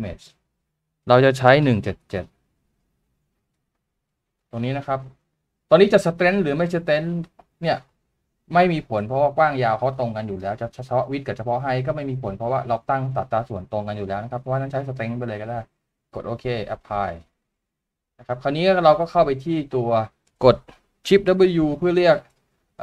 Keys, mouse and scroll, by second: 3.3 double click.